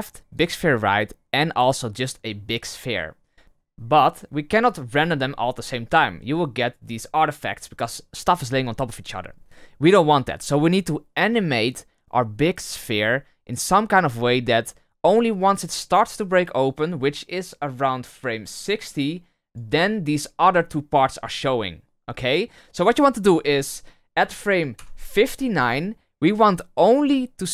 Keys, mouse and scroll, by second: 0.3 click, 1.9 click, 3.4-3.7 scroll up 4, 3.7 middle drag, 4.0-4.4 scroll down 1, 4.4 middle click, 4.6-5.4 scroll up 5, 5.4-5.8 middle drag, 5.8 scroll down 1, 6.0-6.8 scroll up 3, 9.1-10.6 scroll down 3, 10.6 scroll down 1, 16.1-19.1 drag, 24.8 Left, 27.0 click, 27.3 click.